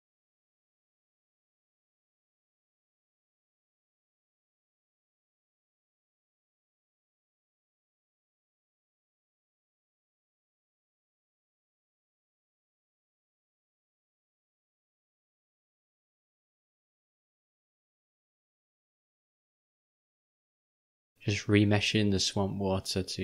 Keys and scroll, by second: 10.0 v.